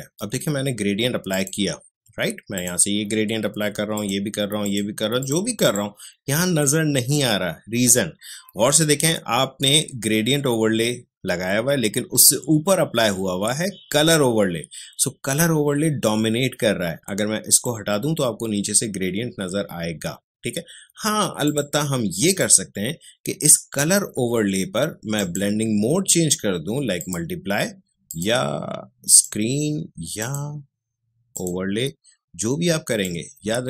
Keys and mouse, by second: 17.5 click, 21.4 click, 25.1-33.6 drag.